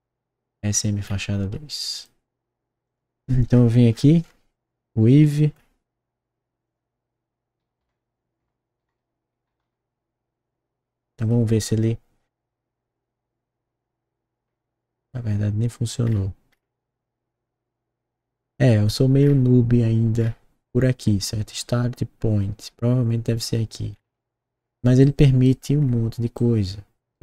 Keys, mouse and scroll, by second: 1.0 scroll up 1, 1.5 scroll down 1, 1.9 click, 2.8 click, 3.4 scroll up 1, 3.9 middle click, 5.2 click, 5.5 middle click, 6.6 click, 7.7-9.4 typing, 11.2 click, 14.4 middle click, 16.0 middle click, 19.1 middle click, 20.1 middle click, 21.0 middle click, 24.4 middle click, 25.0 right click, 25.7 middle click, 26.3 right click.